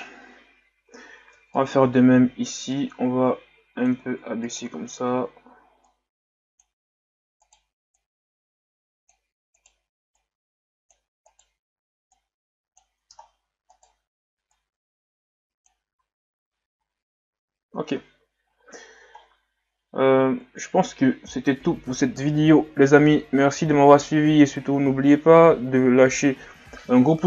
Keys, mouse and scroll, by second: 0.4-0.8 scroll up 1, 0.8 Tab, 1.3 Tab, 1.5 right click, 1.8 Tab, 2.7-4.4 drag, 4.4 right click, 5.9-7.4 drag, 7.4 right click, 8.0-9.6 drag, 9.6 right click, 10.2-11.2 drag, 11.2 right click, 12.1-13.2 drag, 13.2-13.7 scroll down 2, 13.7 right click, 14.5-15.9 drag, 15.9 Tab, 16.5-17.2 scroll down 6, 17.9 ctrl+s, 18.6-19.2 scroll down 1, 19.6-19.9 scroll up 2.